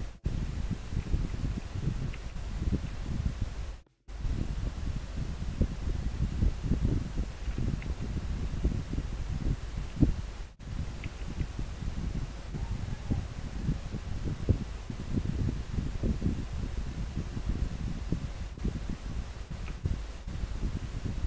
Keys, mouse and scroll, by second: 3.5-3.8 scroll up 1, 11.5-12.3 scroll up 1.